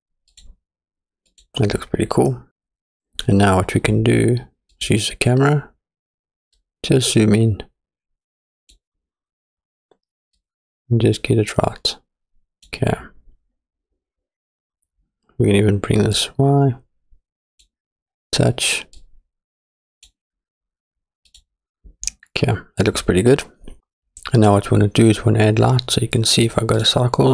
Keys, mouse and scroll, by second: 1.3 click, 2.5 scroll up 1, 2.7 scroll down 1, 4.8 click, 6.6-8.9 drag, 10.4-12.7 drag, 14.0-16.2 scroll down 3, 16.2-17.7 drag, 19.0-20.2 drag, 21.3 click, 22.1-23.8 scroll up 3.